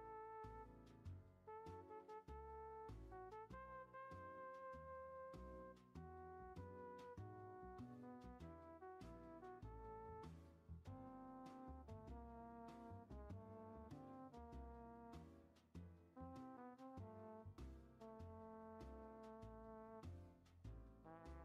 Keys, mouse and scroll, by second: 2.8 ctrl+z, 3.3 scroll down 2, 3.6-5.0 middle drag, 5.0 click, 7.2-8.9 drag, 8.9 ctrl+z, 9.9 click, 12.8-14.1 drag, 14.6 e, 17.5 ctrl+z, 17.7 ctrl+z, 18.0 ctrl+z, 18.2 ctrl+z, 18.6 ctrl+z, 18.9 ctrl+z, 20.3 ctrl+z, 21.3 click.